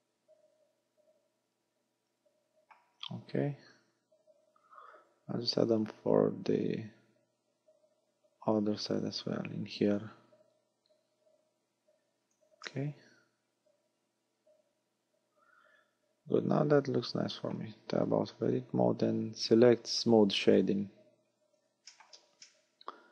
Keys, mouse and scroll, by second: 4.8 ctrl+r, 12.4 click, 12.7 middle click, 17.9 Tab, 18.3 scroll down 3, 19.6 scroll down 2, 20.5 click, 21.3 scroll up 4, 22.0 shift+middle click, 22.5 middle click.